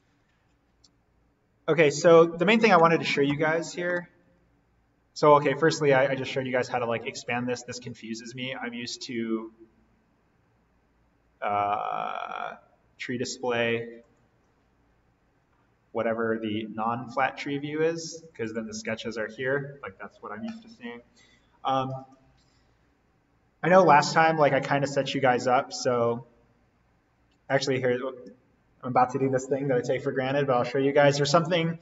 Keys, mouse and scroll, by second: 4.1 right click, 5.4 click, 8.2 right click, 13.9 click, 18.4 click, 22.0-22.5 scroll up 1, 22.5-24.8 scroll down 1, 25.1 right click, 27.5 click.